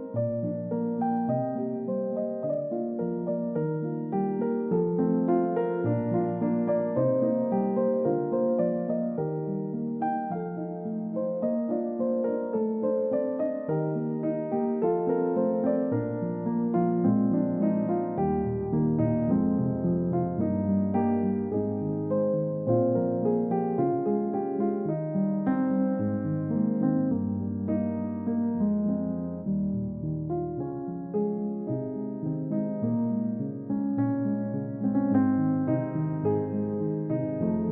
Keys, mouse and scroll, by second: 1.5 middle click, 4.9 space, 6.1 typing, 10.4 alt+click, 11.3 alt+middle click, 11.6 alt+scroll up 1, 12.3-12.7 scroll up 1, 12.7 alt+middle click, 13.1 alt+click, 14.8 middle click, 30.5 scroll up 1, 32.4 scroll down 1, 32.6 middle click, 33.1 scroll down 1, 33.6 middle click, 36.0 double click.